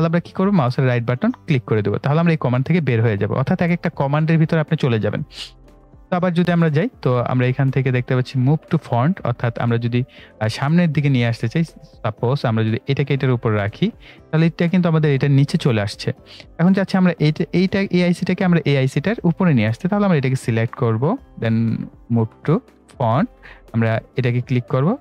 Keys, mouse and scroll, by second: 0.9 right click, 2.3 click, 6.0 click, 21.2 click.